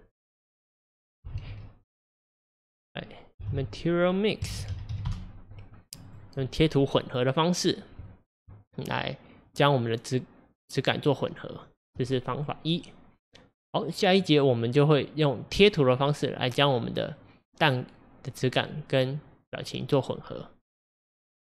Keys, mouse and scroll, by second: 7.2 Left, 9.4-21.6 middle drag.